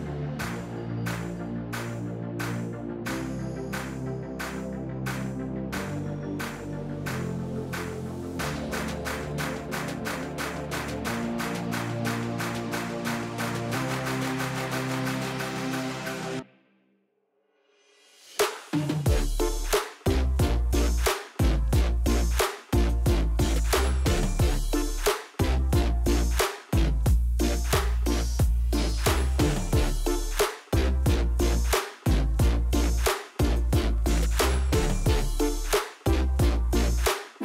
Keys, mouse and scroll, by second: 0.4 ctrl+r, 1.9 click, 2.0-3.1 middle drag, 3.1 click, 4.2 click, 4.4 click, 4.8 Tab, 5.4 click, 6.4 click, 7.4 i, 8.4 click, 8.7 click, 9.1 Tab, 9.4 click, 9.8-10.3 middle drag, 10.3-10.6 scroll down 1, 10.6 KP_1, 10.9 scroll down 1, 11.1-11.9 shift+middle drag, 11.9 click, 13.3-13.7 scroll up 1, 13.7 click, 14.6-15.6 scroll down 1, 15.6 click, 15.9 click, 16.1 Tab, 16.2-16.5 scroll up 1, 16.6 shift+middle click, 17.1 click, 17.4 click, 18.4 click, 19.3 g, 20.4 click, 20.6-21.2 scroll up 1, 21.2 ctrl+r, 22.6 Tab, 22.7 click, 23.0 scroll down 1, 23.7 click, 23.9 scroll down 1, 24.1-25.0 shift+middle drag, 25.0 click, 25.9 click, 26.4 shift+a, 27.9 s, 29.3 click, 29.4 g, 30.5 click, 31.0 s, 32.7 click, 32.9 g, 33.8 click, 34.1 Tab, 34.5-35.0 scroll up 1, 35.0 ctrl+r, 35.9 click, 37.1 click.